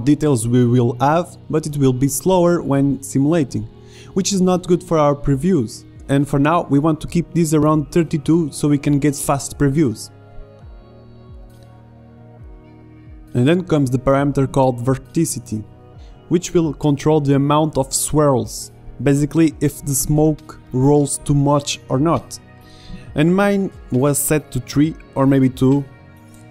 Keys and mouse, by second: 0.4 middle click, 3.3 alt+a, 4.4 alt+a, 9.3 click, 9.5-24.9 middle drag, 24.9-26.5 drag.